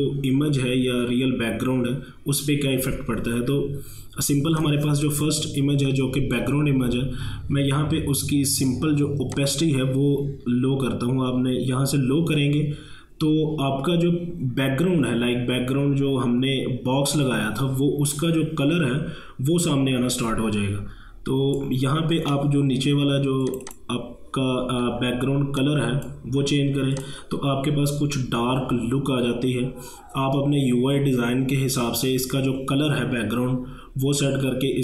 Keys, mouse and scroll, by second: 4.6 click, 9.4-19.4 drag, 22.2 scroll down 1, 23.5-27.0 drag.